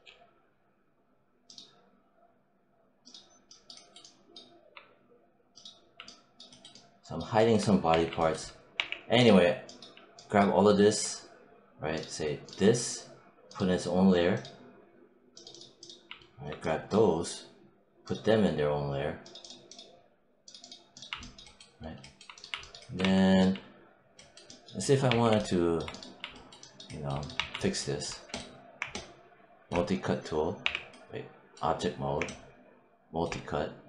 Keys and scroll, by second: 7.8 5, 8.6 w, 22.9 1, 24.9 3, 27.2 1, 30.5 w.